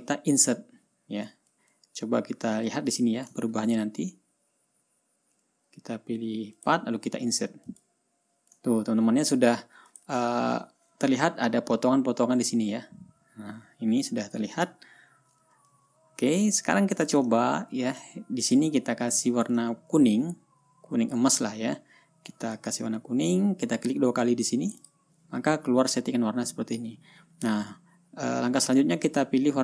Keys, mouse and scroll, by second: 0.1 click, 2.7-3.3 ctrl+scroll up 2, 3.4 ctrl+click, 4.1 ctrl+scroll up 1, 4.7 ctrl+scroll up 1, 5.2 ctrl+scroll down 1, 5.5 ctrl+scroll up 1, 7.1 click, 8.2 click, 9.1-9.6 ctrl+scroll down 3, 10.4 ctrl+click, 11.1-11.9 ctrl+scroll down 1, 11.9-12.4 ctrl+scroll up 4, 12.7-13.4 ctrl+scroll down 4, 13.7-14.5 ctrl+scroll up 6, 14.7-15.5 ctrl+scroll down 4, 16.2-17.0 ctrl+drag, 17.5 click, 18.2 ctrl+scroll up 2, 18.9 ctrl+click, 20.1-20.7 ctrl+scroll down 2, 20.7-21.8 ctrl+drag, 22.9 click, 23.2-23.5 scroll down 2, 25.2 click, 28.2-29.6 drag.